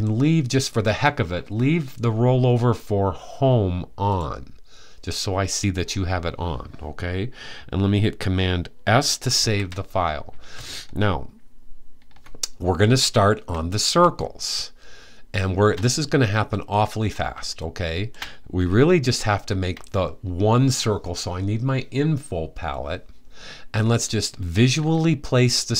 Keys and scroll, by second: 9.1 super+s.